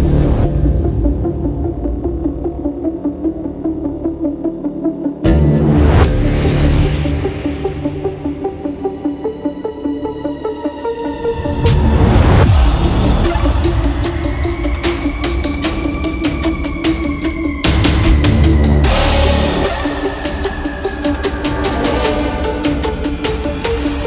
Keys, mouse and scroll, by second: 1.1 click, 2.6 click, 7.4 scroll down 1, 7.7 scroll up 1, 10.1 click, 10.3 ctrl+t, 10.7 scroll down 1, 11.1-11.5 scroll up 1, 11.5 shift+click, 12.5 Return, 12.8 scroll up 1, 13.2 scroll down 1, 13.3 scroll up 1, 13.4 scroll down 1, 13.5 scroll up 1, 14.3 click, 15.0 scroll down 1, 16.1 scroll up 1, 16.7 scroll down 1, 17.0 scroll up 1, 19.3 click, 20.9-24.0 typing.